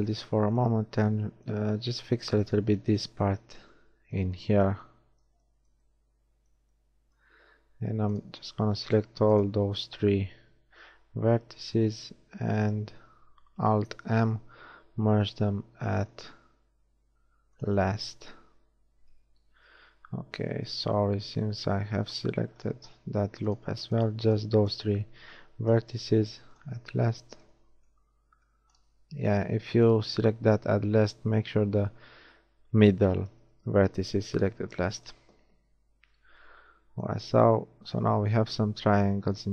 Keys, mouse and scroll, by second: 8.0-12.0 right drag, 11.3 x, 14.0 alt+m, 19.4 ctrl+z, 25.7 alt+m, 27.7 ctrl+z, 34.2 alt+m, 35.6 a.